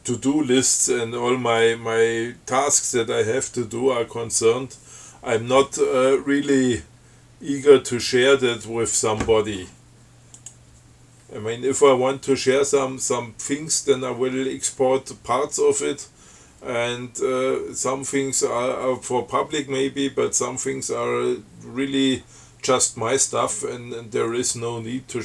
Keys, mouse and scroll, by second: 8.1 click, 10.6 click.